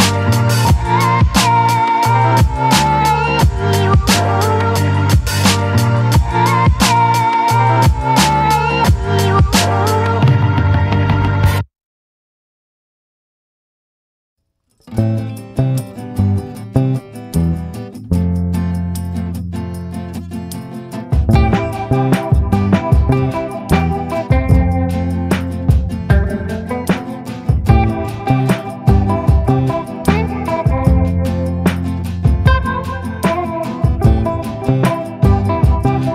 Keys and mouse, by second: 1.0 b, 2.1 b, 2.7 b, 3.7 middle click, 4.3 b, 5.4 b, 6.3 middle click, 8.7 click, 9.6 click, 9.8-11.3 drag, 11.8-12.4 ], 12.4-16.9 drag, 17.2 a, 18.2 middle click, 19.0 middle click, 19.9 shift+middle click, 20.7 middle click, 21.4 shift+middle click, 23.2 ctrl+i, 23.7-27.3 typing, 28.4 b, 29.2 b, 29.8 middle click, 31.0 click, 31.7 click, 32.5 click, 33.4 click, 34.9-36.1 drag.